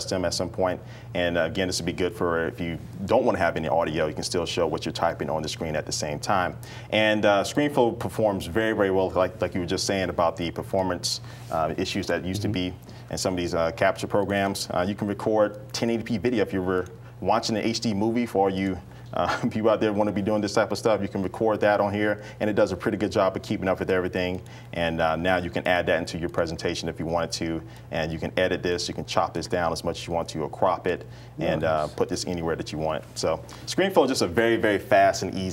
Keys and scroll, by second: 0.1 super+k, 2.4-6.1 typing.